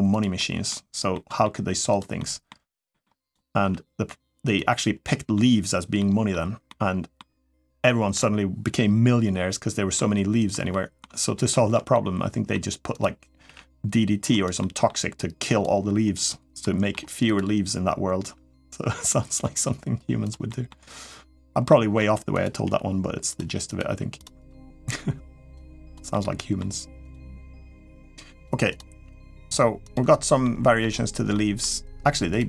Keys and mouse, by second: 0.1 middle click, 0.9 middle click, 1.9 middle click, 2.7 middle click, 3.0 click, 3.4 g, 4.8 middle click, 5.8 middle click, 6.5 middle click, 7.6 middle click, 9.7 middle click, 10.5 middle click, 11.3 shift+middle click, 11.7 middle click, 12.8 click, 13.2 g, 14.4 middle click, 15.3 click, 15.9 click, 16.4 middle click, 17.0 click, 18.0 g, 20.2 middle click, 21.5 middle click, 22.4 g, 23.7 g, 24.4 g, 25.9 middle click, 27.1 g, 28.5 click, 28.8 g, 30.2 middle click, 31.1 middle click, 32.1 click.